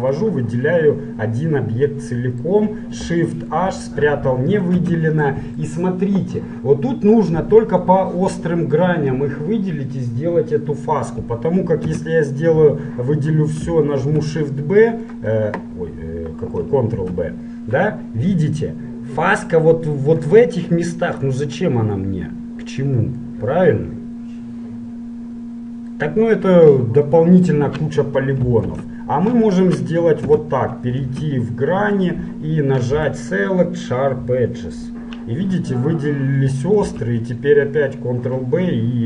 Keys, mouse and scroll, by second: 0.9-2.5 middle drag, 3.5 shift+h, 4.3-7.3 middle drag, 4.9 a, 7.5-9.7 middle drag, 14.2 a, 14.2 shift+b, 17.2 ctrl+b, 21.3-25.3 middle drag, 27.4-30.3 middle drag, 28.9 ctrl+z, 30.3 a, 31.3 ctrl+Tab, 37.1 ctrl+b.